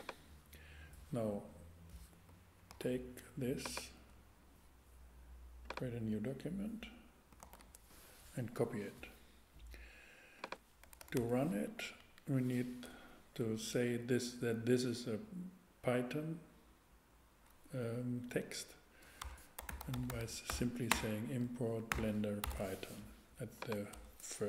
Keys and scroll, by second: 2.7 super+c, 7.4 super+v, 10.8 Return, 11.7 Up, 18.3-22.5 typing, 23.9 BackSpace.